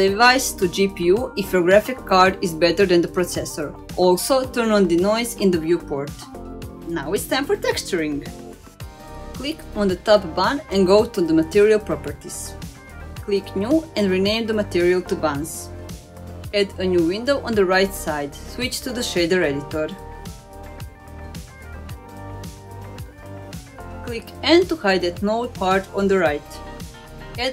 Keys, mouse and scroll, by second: 0.6 click, 1.3-3.1 drag, 3.8-4.6 drag, 5.4 click, 5.9 click, 6.3-7.0 middle drag, 7.4 click, 8.0 click, 8.2-9.9 middle drag, 10.5 click, 11.5 click, 12.5 click, 13.5 click, 14.1 click, 14.3-16.5 drag, 18.1 click, 18.4-18.9 scroll down 2, 18.9-19.3 middle drag, 20.7-22.2 drag, 22.7-23.8 drag, 25.2 n, 27.2-27.5 scroll up 1.